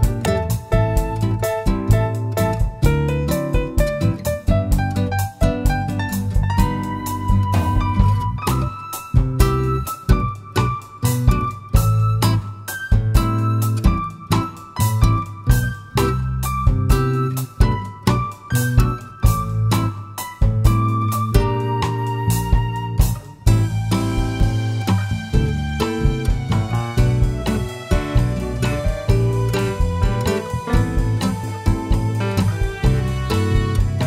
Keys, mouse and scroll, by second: 0.0 click, 0.4-0.7 scroll up 1, 0.7 middle click, 2.2 ctrl+r, 5.2 click, 5.7-6.1 scroll down 1, 6.1 shift+middle click, 7.6-8.1 scroll up 1, 8.1 ctrl+r, 12.5 click, 13.3 shift+middle click, 14.0-14.6 scroll up 1, 14.6 shift+middle click, 15.2 ctrl+r, 18.6 click, 19.2 shift+middle click, 21.0 middle click, 21.0 3, 21.2 click, 23.0 i, 25.0 click, 25.2 scroll down 1, 25.5 Tab, 25.8-27.0 middle drag, 26.9 scroll down 1, 28.7 /, 28.8 middle click, 29.5 click, 29.8-30.3 scroll down 1, 30.3 scroll up 1, 30.8 click, 31.0-32.1 right drag, 32.1-34.0 middle drag, 33.0-33.5 scroll down 2, 33.5 Tab.